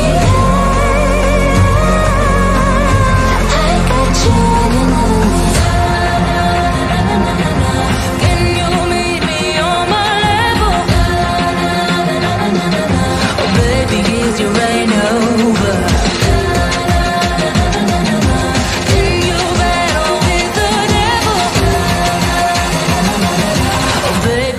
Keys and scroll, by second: 14.3 Right, 16.4 F3, 16.7 shift+F2, 17.4 ctrl+z, 17.8 F4, 20.6 space.